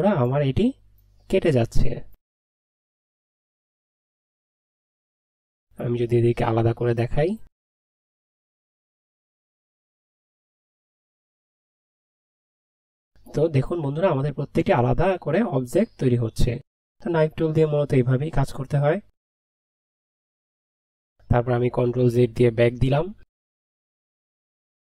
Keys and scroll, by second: 22.0 ctrl+z.